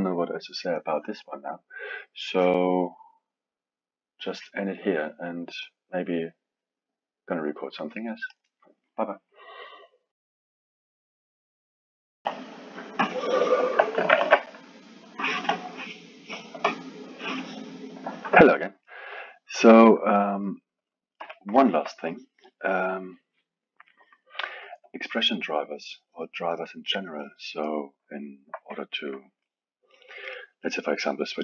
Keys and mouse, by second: 18.4 middle click, 19.2 middle click, 20.2 middle click, 21.2 KP_1, 21.5-27.7 alt+middle drag, 28.2-31.4 alt+middle drag.